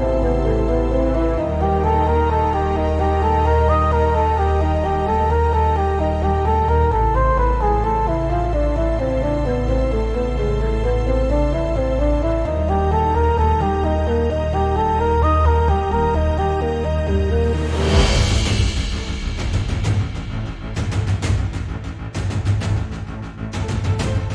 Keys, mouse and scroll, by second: 0.9 click, 1.5-1.9 scroll up 1, 1.9 s, 3.0 click, 3.1 g, 4.6 click, 4.8 scroll down 1, 5.0 Tab, 5.6 click, 5.9 g, 6.6 click, 6.8 Tab, 6.9-7.3 scroll up 1, 8.2 Tab, 8.3 g, 9.4 click, 9.6 Tab, 9.7 scroll down 1, 9.9 click, 10.8 Tab, 11.1 click, 11.6 shift+click, 11.9 scroll up 1, 12.2 g, 13.4 click, 13.6 s, 15.0 click, 15.2 Tab, 15.4-15.8 scroll down 1, 16.2 Tab, 16.5 click, 17.0 scroll up 1, 17.3 s, 19.1 right click, 19.3 s, 21.1 shift+click, 21.2 g, 22.4 click, 22.7-23.0 scroll down 2, 22.8 Tab.